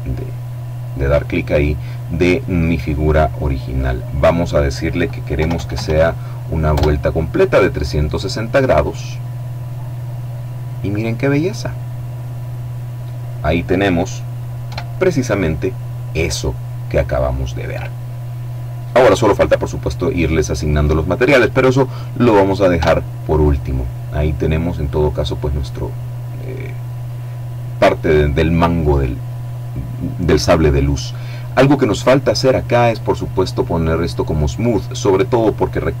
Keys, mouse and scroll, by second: 3.0 click, 4.6 KP_3, 4.8 KP_6, 5.0 KP_0, 6.0 KP_Enter, 8.5-10.2 middle drag, 10.2 click, 10.8-12.4 middle drag, 12.4 click, 13.9 KP_7, 19.5-21.1 middle drag, 21.9 Tab, 22.6-24.6 middle drag, 24.8 right click, 26.0 right click, 31.6-32.5 scroll up 1, 33.3 click, 34.2-35.0 scroll down 1, 35.0-35.5 scroll down 1, 35.6-36.0 middle drag.